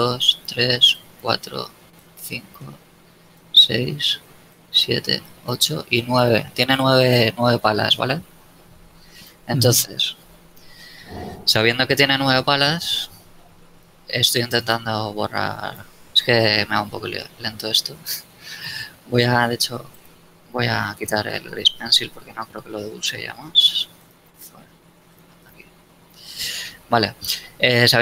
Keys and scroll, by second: 9.2 d, 19.3 n, 20.3 Escape, 21.0 n, 26.3 n.